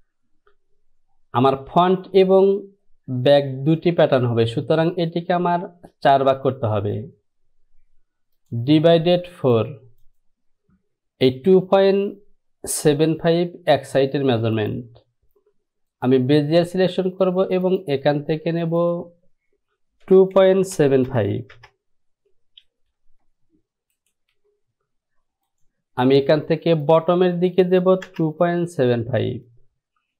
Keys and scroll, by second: 20.3 KP_2, 20.5 KP_Decimal, 20.9 KP_7, 21.2 KP_5, 21.7 Return, 28.2 Return.